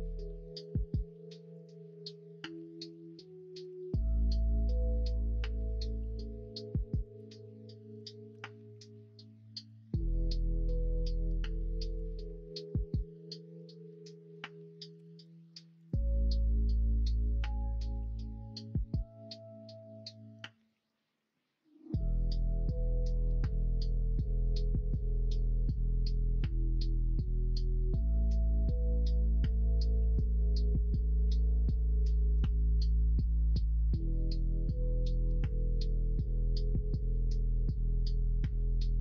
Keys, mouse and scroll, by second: 2.5 3, 2.7 click, 8.3 ctrl+r, 12.0 ctrl+r, 12.9 middle click, 14.9 2, 16.9 ctrl+b, 27.8 middle click, 31.2 3, 32.9 click, 36.1 middle click, 37.1 x, 38.7 middle click.